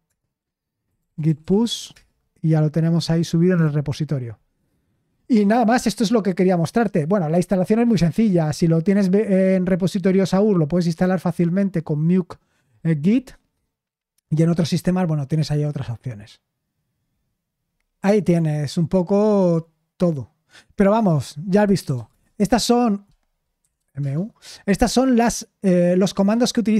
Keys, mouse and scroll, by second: 0.0 Return, 0.6-2.1 typing, 6.7-13.1 scroll down 1, 13.1-13.9 scroll down 1, 13.9-15.2 scroll down 1, 15.2-17.1 scroll down 1, 17.1-18.3 scroll down 1, 18.3-20.4 scroll up 1, 20.4-21.6 scroll up 1, 21.4-24.2 typing.